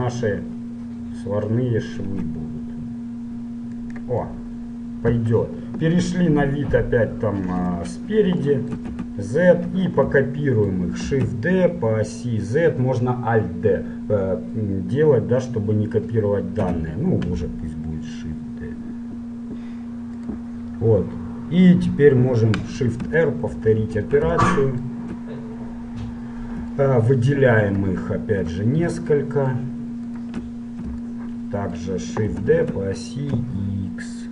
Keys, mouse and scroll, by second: 0.5 middle click, 2.2 s, 4.4-5.9 middle drag, 6.2 KP_7, 7.7 KP_1, 9.2 z, 11.4 shift+d, 12.2 click, 20.8-22.8 middle drag, 23.6 shift+r, 23.9 shift+r, 27.9-32.2 right drag, 29.3-30.4 middle drag, 32.2-33.3 middle drag, 32.6 shift+d.